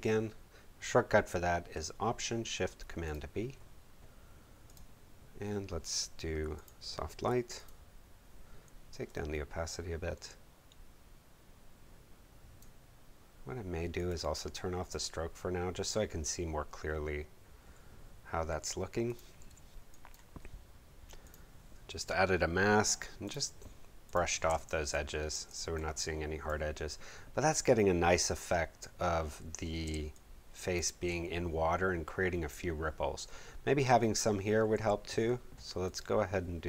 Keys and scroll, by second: 19.4 b, 24.4 space, 29.8 space, 34.7 v.